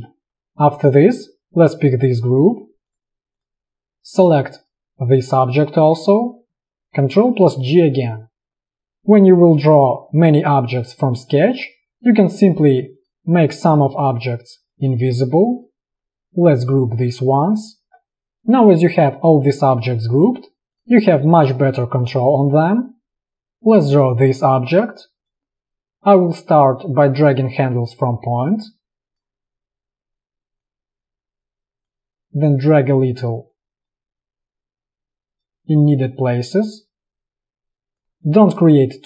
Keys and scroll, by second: 7.4 ctrl+g, 17.6 ctrl+g, 21.2 space, 22.7 v, 32.5 space, 38.2 space.